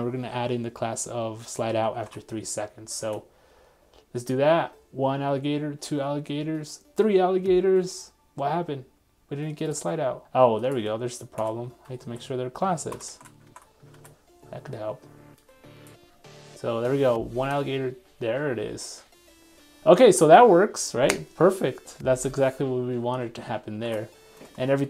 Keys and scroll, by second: 3.0 super+r, 13.1 super+s, 13.5 super+Tab, 14.0 super+r.